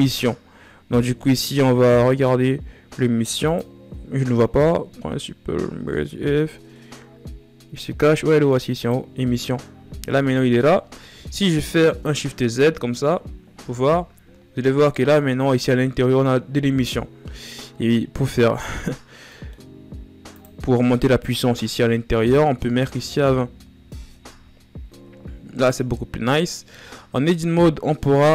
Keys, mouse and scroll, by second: 10.7 KP_1, 11.6 shift+z, 14.3 scroll down 3, 19.0 scroll up 5, 19.9 scroll up 2, 22.8-26.3 drag, 27.2 a.